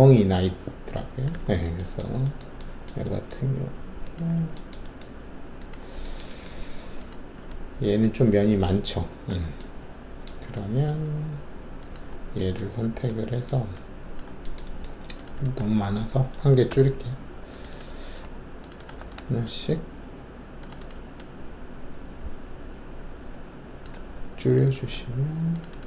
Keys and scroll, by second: 16.7 alt+2, 18.0 alt+q, 18.9 alt+q, 23.9 alt+q, 24.9 alt+q.